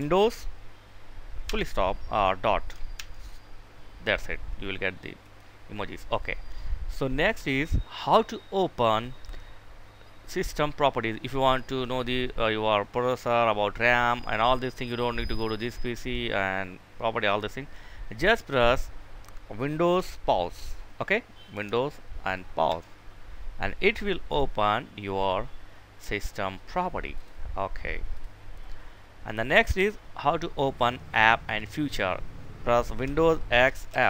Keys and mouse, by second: 4.4 click, 15.2 right click, 16.6 click, 26.4 click, 32.9 super+x, 33.2 super+f.